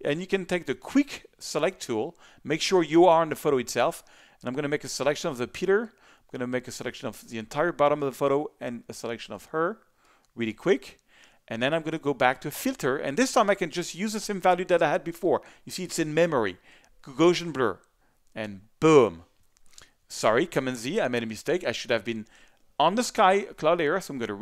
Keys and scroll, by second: 20.5 super+z.